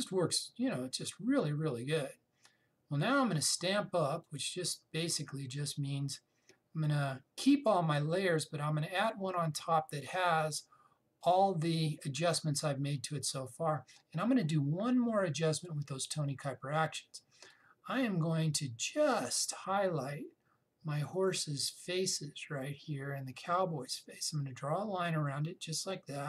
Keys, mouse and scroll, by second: 4.9 click, 9.6 click, 16.2-26.2 drag.